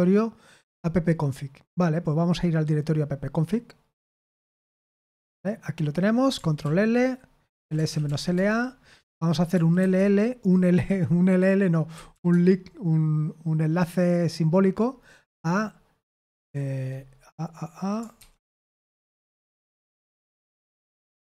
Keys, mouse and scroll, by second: 1.1-4.1 scroll down 1, 4.1 click, 4.5 click, 5.0 click, 6.6 ctrl+l, 7.3-9.9 typing, 11.6-12.6 typing, 18.1-18.9 typing, 20.3-21.2 typing.